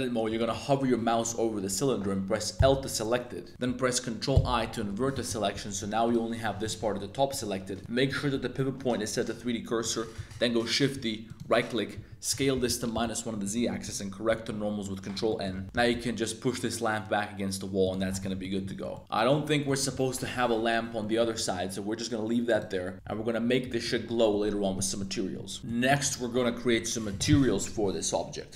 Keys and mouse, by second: 0.3 shift+click, 2.5 l, 4.3 super+i, 4.6 z, 5.5 g, 6.7 shift+click, 7.3 click, 7.8 click, 10.2 shift+d, 11.3 click, 11.9-13.3 typing, 12.9 Return, 14.3 super+n, 15.2 shift+click, 15.5 Tab, 15.6 x, 15.7 g, 15.9 x, 17.8 click, 18.2 a, 18.4 middle click, 18.7 shift+middle drag, 18.9-19.3 middle drag, 19.6 middle click, 21.0 middle drag, 22.5 right click, 23.7 shift+middle drag, 25.6 middle click, 25.6 a, 25.8 middle drag.